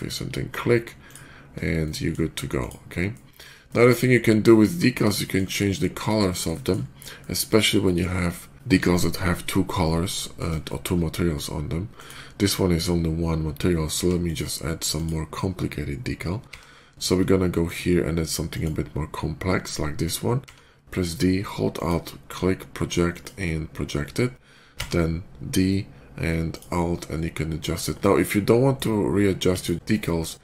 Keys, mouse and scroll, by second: 0.9 alt+click, 1.4 alt+middle click, 1.7 alt+middle drag, 2.4 alt+click, 3.0 middle drag, 3.5 shift+middle click, 4.0-4.4 shift+middle drag, 5.1 shift+middle click, 6.1 shift+middle click, 6.4 shift+middle click, 7.0-7.4 shift+middle drag, 7.7 shift+middle click, 9.7-10.4 middle drag, 11.8 shift+click, 13.8 x, 14.1 click, 14.8 click, 16.3 d, 17.5 click, 18.3 click, 18.9 d, 20.3 d, 21.6 alt+click, 22.9 alt+click, 24.6 d, 26.3 alt+click, 27.6 alt+click, 28.6 alt+right click, 29.2 x, 29.4 click, 30.1-30.4 shift+middle drag.